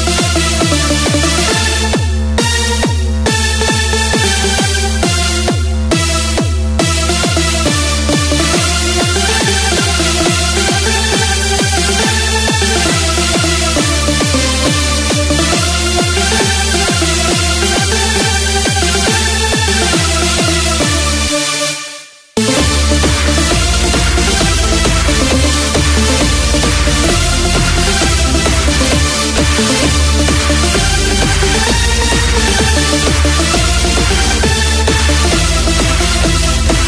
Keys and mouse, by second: 8.8-14.1 drag.